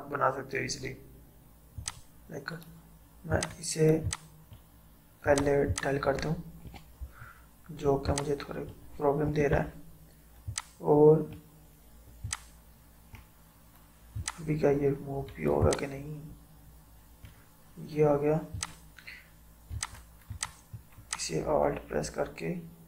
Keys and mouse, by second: 6.7 Delete, 8.1 click, 9.3 Delete, 10.5-22.8 drag.